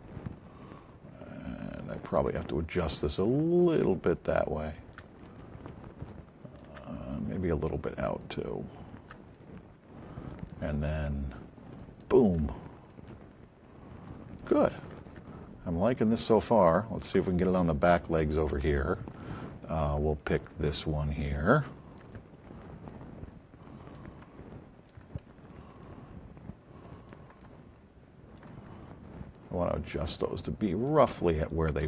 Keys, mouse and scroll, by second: 1.5 alt+click, 6.1 alt+click, 8.2 click, 11.8 click, 12.9-14.4 alt+drag, 15.2 alt+click, 16.5 alt+click, 22.8 click, 25.8-27.2 drag, 27.3-28.4 alt+drag.